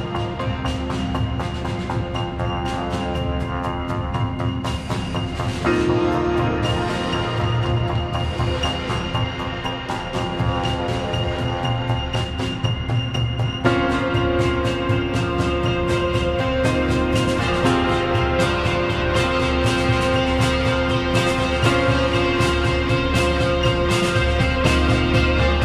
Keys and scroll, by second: 3.4 space, 5.2 2.